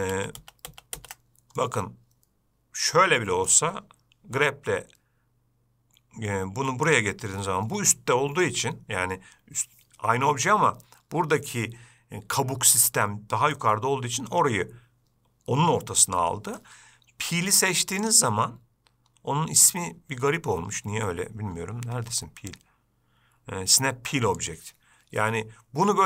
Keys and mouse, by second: 0.4 ctrl+z, 1.9-3.8 middle drag, 4.7 g, 7.7-8.8 middle drag, 13.9-16.9 middle drag, 18.3-25.4 drag.